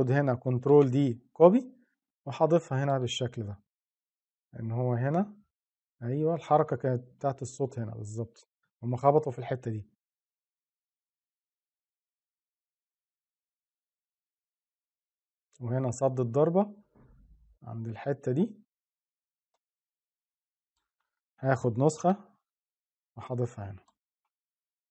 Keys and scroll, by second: 0.4 ctrl+d, 21.7 ctrl+d.